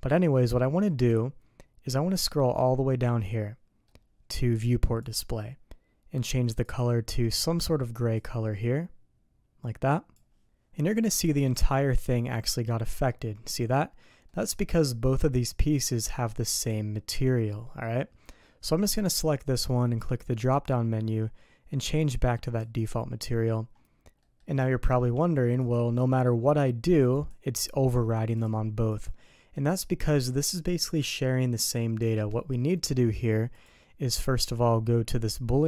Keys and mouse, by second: 2.1-3.9 middle drag, 5.0 click, 6.7 click, 10.8 middle click, 11.4 click, 12.3 middle click, 14.3 middle click, 15.3 click, 16.5 click, 20.5-22.8 drag, 24.2 middle click, 24.7 shift+middle drag, 25.6 click, 26.5 click, 27.2 click, 28.4 click, 28.9 click, 33.5 click.